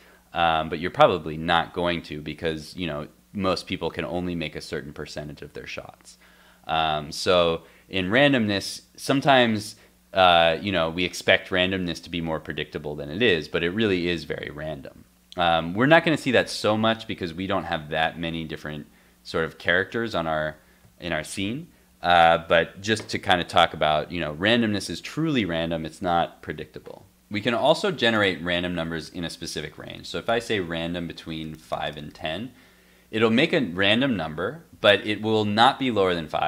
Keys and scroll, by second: 17.3 alt+Tab, 20.4 alt+Tab.